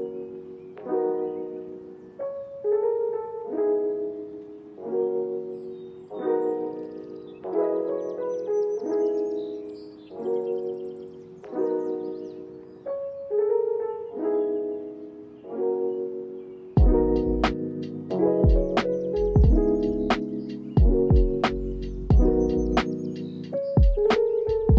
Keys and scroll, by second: 5.1 Up, 11.0 Down.